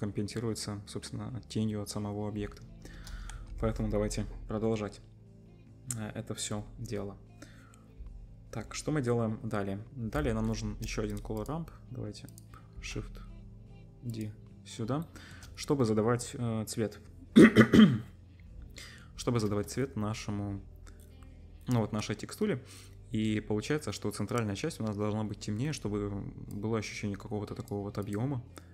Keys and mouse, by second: 2.9 KP_0, 4.4 ctrl+s, 10.7 shift+a, 11.5-12.3 drag, 12.4-15.0 shift+drag, 12.8 shift+d, 15.0 shift+middle drag, 15.4 drag, 15.5 middle click, 15.6 right click, 19.9 right click, 21.1-21.9 right drag, 22.4-23.1 middle drag, 23.3 middle click, 25.2 click, 25.3-26.5 middle drag, 28.2-28.7 drag.